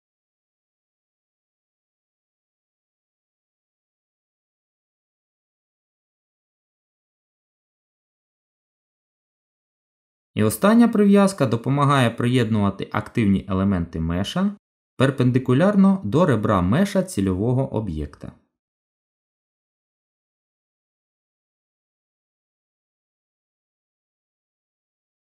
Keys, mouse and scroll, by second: 1.1 middle click, 3.0 ctrl+z, 3.5 middle click, 6.9 Tab, 11.5 click, 15.1 middle click, 20.6 KP_1, 21.3 z, 22.5 Tab, 24.4 click.